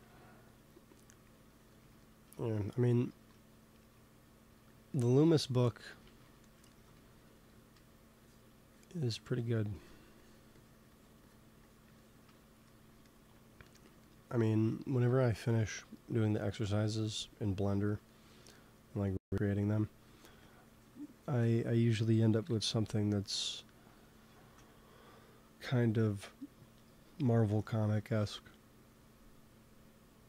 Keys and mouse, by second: 0.6-2.8 drag, 3.0 ctrl+s, 4.9-6.0 middle drag, 6.0 shift+c, 6.9 f, 7.6 f, 8.1-13.8 drag, 14.8-16.7 drag, 15.2 ctrl+s, 16.6 KP_1, 19.9 x, 20.2 f, 20.4-22.4 drag, 22.3 KP_1, 28.0 ctrl+s.